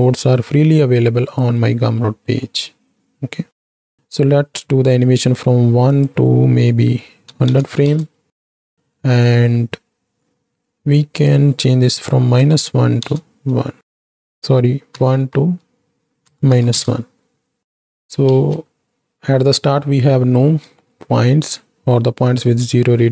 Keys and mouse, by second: 2.1 middle click, 6.0-8.0 drag, 7.6 KP_0, 8.8 middle click, 11.3-13.1 drag, 13.9 shift+Right, 14.1 shift+Left, 14.8-16.9 drag, 18.3 ctrl+space, 20.8-21.2 shift+drag.